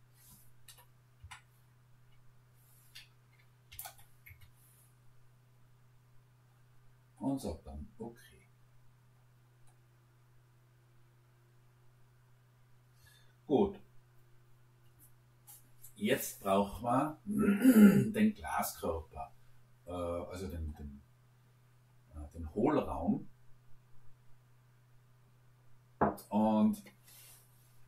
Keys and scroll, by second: 0.7 BackSpace, 1.2 Caps_Lock, 3.7 ., 3.9 5, 4.3 Return.